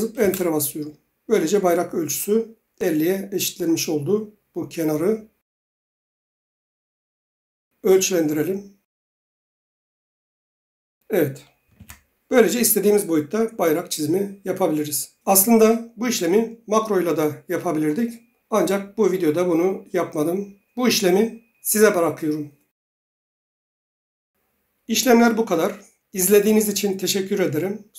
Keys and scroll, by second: 0.2 Return, 11.8 ctrl+z.